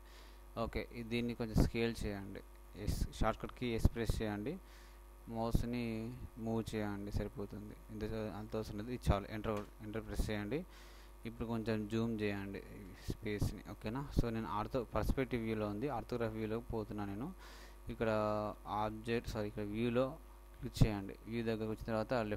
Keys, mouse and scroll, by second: 1.3-4.3 middle drag, 4.0 s, 12.2-13.4 middle drag.